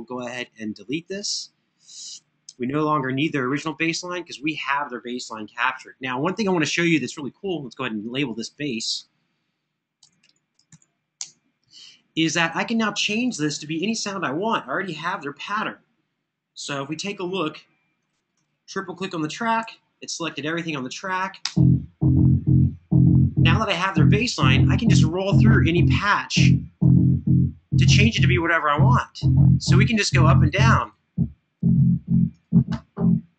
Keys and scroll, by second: 9.5-11.0 typing, 11.0 Return, 16.6 alt+f, 19.3 alt+f, 21.1 space, 24.4 super+=.